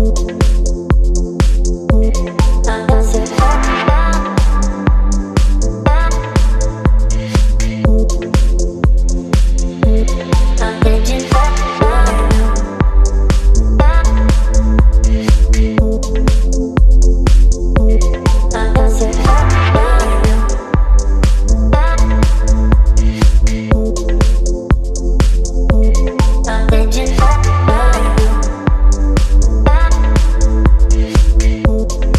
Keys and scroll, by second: 4.6 space, 13.2 x, 13.9 ctrl+BackSpace, 14.5 ctrl+d, 15.9 space, 16.9 v, 20.2 space, 27.7 Delete, 28.6 ctrl+d, 31.1 v.